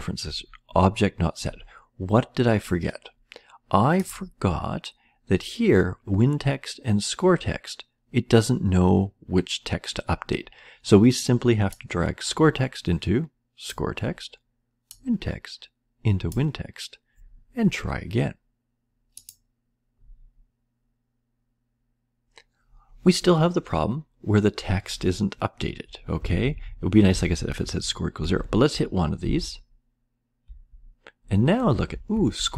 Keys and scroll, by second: 25.5 Left, 26.2 Down, 26.4 Right, 27.5 Right, 27.5 Up, 28.2 Down, 28.5 Right, 29.2 Down, 30.4 Left, 31.8 Left.